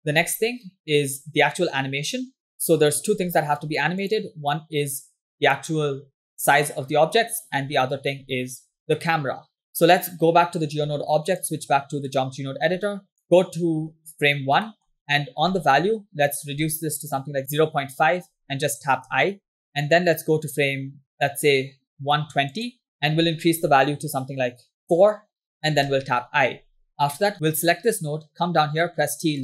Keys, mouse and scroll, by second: 0.6 scroll down 1, 0.9-1.2 middle drag, 1.4-1.8 scroll up 2, 3.3 scroll down 2, 3.8-4.1 scroll up 3, 4.2 click, 5.5 click, 11.3 click, 12.9 scroll down 2, 13.1 middle click, 14.7 middle click, 15.0-16.0 scroll up 7, 15.7 middle click, 16.3-17.9 drag, 19.7 |, 21.2 click, 21.9 click, 23.0 click, 26.0 i, 27.3 click, 28.7 t.